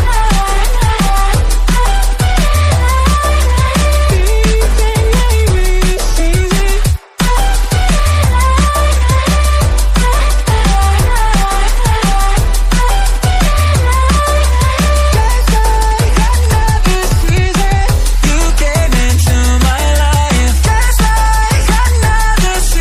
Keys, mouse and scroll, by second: 0.0 s, 2.2 g, 5.4 s, 6.6 click, 7.4-8.1 scroll down 1, 8.1 KP_Divide, 8.4 scroll down 1, 8.7 click, 9.9 KP_7, 10.4 KP_9, 10.8 scroll up 2, 10.9 Tab, 11.3-11.8 scroll down 1, 11.8 ctrl+r, 13.7-14.3 scroll up 2, 14.3 ctrl+r, 15.4 ctrl+z, 16.0 ctrl+r, 17.2 ctrl+r, 21.1-21.6 scroll up 1, 21.6-22.0 scroll down 1.